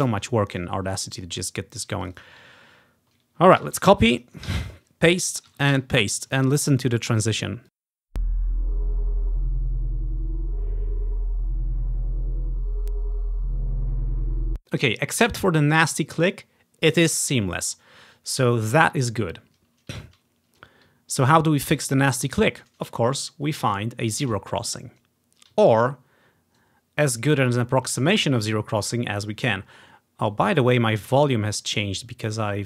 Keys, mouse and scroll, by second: 0.1-1.5 drag, 0.8-1.5 ctrl+scroll up 1, 1.5 ctrl+scroll down 1, 2.1 click, 2.6-4.1 ctrl+scroll down 1, 3.7 ctrl+c, 4.2-5.6 ctrl+drag, 4.6 ctrl+v, 5.6 Right, 5.8 ctrl+v, 6.6 scroll up 1, 7.3 click, 8.0 space, 14.5 space, 21.5-21.8 ctrl+scroll down 1, 21.8 ctrl+z, 24.3-25.4 drag, 25.9-26.5 ctrl+scroll up 1, 26.5 ctrl+scroll up 1, 27.5-28.0 ctrl+scroll down 1, 28.2 scroll up 1, 28.6 ctrl+scroll down 1, 29.0 ctrl+scroll up 1, 30.7-31.7 ctrl+scroll down 1, 32.2 ctrl+scroll up 1.